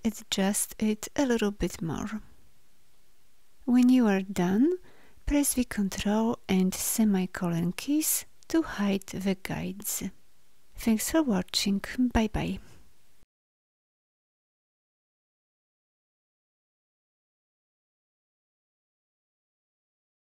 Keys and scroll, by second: 5.3 ctrl+;.